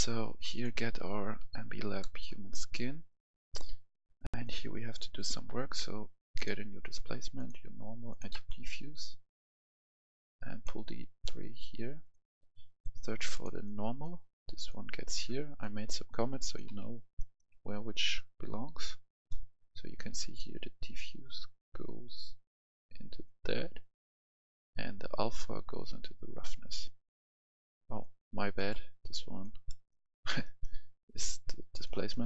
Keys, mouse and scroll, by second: 2.0 right click, 2.4 scroll down 1, 2.8 right click, 4.3 click, 8.0 ctrl+click, 8.4 click, 9.8-15.8 drag, 16.6 Delete, 17.1 right click, 17.5-18.1 scroll down 1, 18.1 click, 18.9 scroll up 2, 19.2 right click, 20.4 right click, 21.8-28.5 drag, 29.6 right click, 30.4 right click, 31.9 right click.